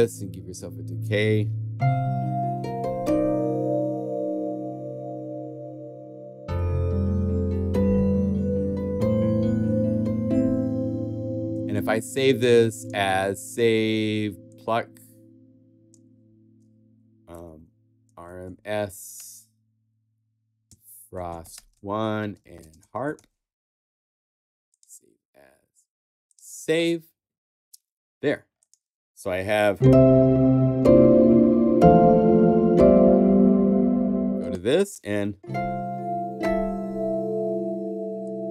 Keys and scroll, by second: 11.8 super+w, 16.7-19.1 typing, 20.4-23.6 typing.